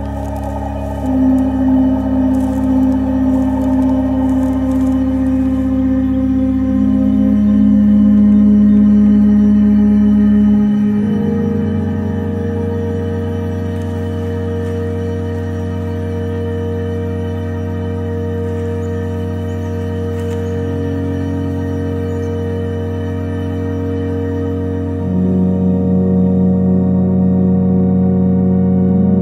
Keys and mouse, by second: 2.7 click, 9.0-10.5 drag, 14.1 g, 18.4 click, 20.6 middle click, 21.5 click, 22.9 g, 27.6-29.2 drag.